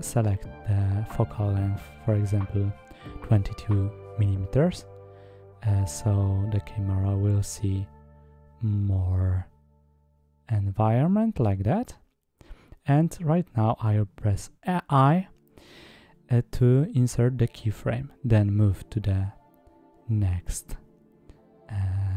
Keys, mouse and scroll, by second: 2.7 middle click, 9.0 click, 11.6 i, 15.0 click, 15.5 click, 16.7 middle drag.